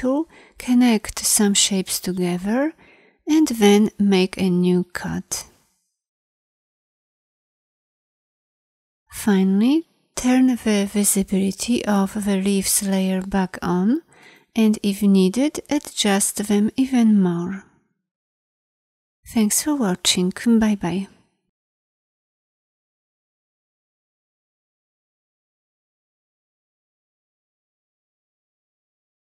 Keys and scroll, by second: 7.2 i.